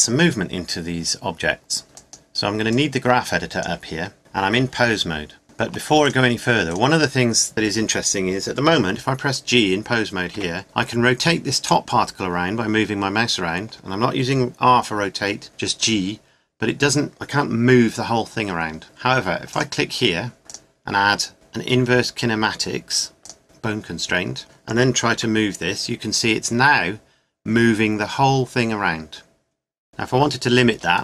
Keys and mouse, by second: 5.4-9.9 right drag, 10.3 g, 19.5 right click, 25.1 g.